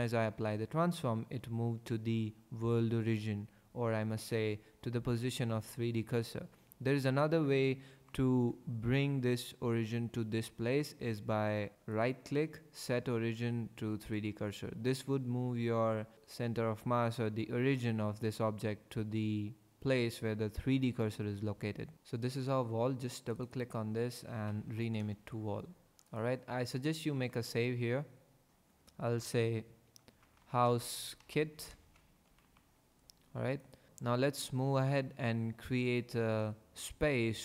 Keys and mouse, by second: 11.9-14.1 drag, 23.5-25.0 drag, 24.7 l, 26.1 click, 27.0 ctrl+s.